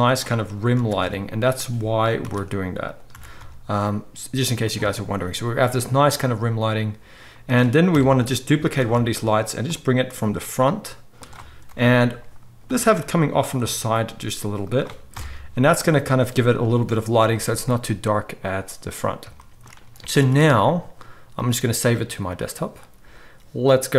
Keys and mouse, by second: 0.7 shift+d, 3.1 r, 7.1-16.5 middle drag, 7.9 KP_3, 8.7 shift+d, 10.1 r, 11.6 KP_7, 12.6 r, 13.6 g, 15.0 KP_0, 20.2 ctrl+s, 22.4 ctrl+s.